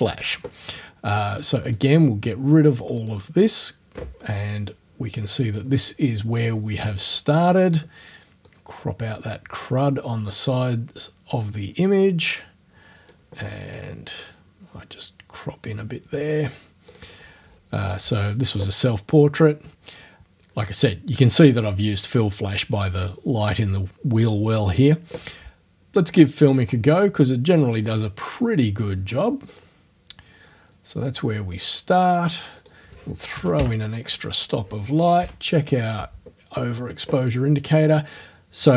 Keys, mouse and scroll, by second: 1.3 click, 1.7 click, 3.0 click, 5.5 click, 6.9 click, 8.5-10.4 drag, 11.0-13.3 drag, 14.2-15.9 drag, 16.9 click, 26.6 click, 27.8 click, 29.5 click, 31.6 click, 32.6 right click, 33.4 KP_1, 33.6 Return, 35.2 o.